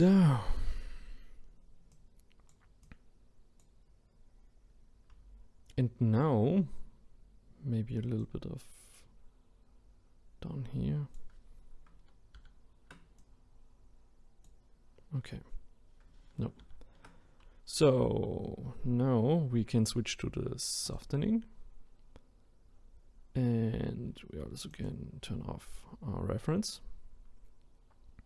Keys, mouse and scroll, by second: 1.9-6.0 drag, 8.2-11.2 drag, 12.4 ctrl+z, 13.2-16.4 drag, 16.6 ctrl+z, 20.9-22.7 drag, 22.7-24.7 scroll down 1, 24.7 click, 27.6-28.2 scroll up 2.